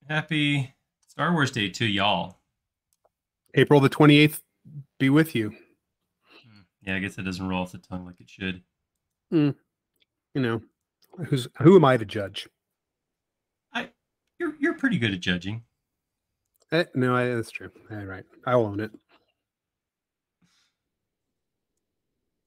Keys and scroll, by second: 3.5 i, 9.6 l, 13.4 space, 14.7 l, 17.0 c, 18.6 Left, 20.3 Left.